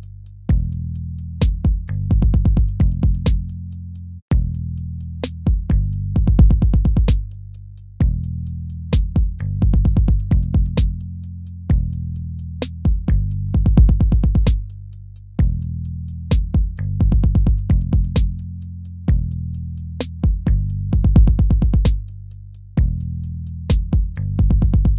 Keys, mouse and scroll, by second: 23.8 ctrl+z, 24.7 ctrl+z.